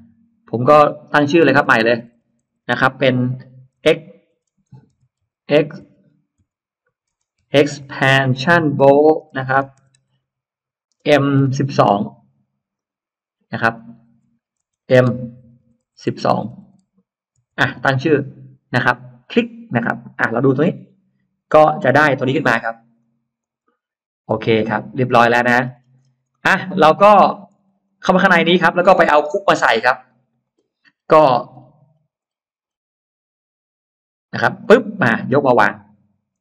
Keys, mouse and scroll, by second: 1.4 BackSpace, 1.6 BackSpace, 1.8 BackSpace, 2.1 BackSpace, 3.7-11.4 typing, 4.4 Caps_Lock, 6.9 Caps_Lock, 12.6 right click, 13.6 click, 14.4 Caps_Lock, 15.0-17.3 typing, 19.1 click, 20.5 click, 21.8 click, 22.8 click, 23.3 click, 24.4 click, 24.4 e, 25.4-26.1 scroll down 2, 26.1 middle click, 26.6-27.3 scroll up 2, 27.5 space, 27.7 click, 28.0 click, 29.7 scroll down 1, 30.5 scroll down 1, 31.0-31.7 scroll down 1, 32.5-32.9 scroll up 1, 34.5 click, 35.9-36.4 scroll up 1.